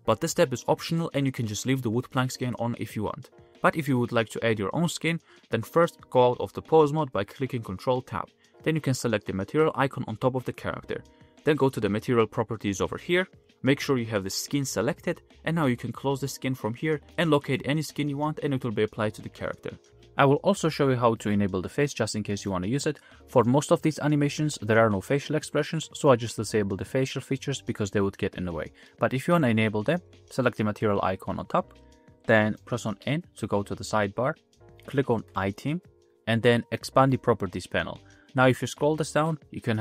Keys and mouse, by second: 0.6 click, 1.2-3.3 middle drag, 3.8-4.1 middle drag, 4.1 space, 5.1 space, 6.0 ctrl+Tab, 6.0-7.0 middle drag, 7.3 ctrl+Tab, 9.7 middle click, 13.5-15.1 drag, 21.2-23.4 middle drag, 27.9-32.6 middle drag, 33.0 n, 37.1 click.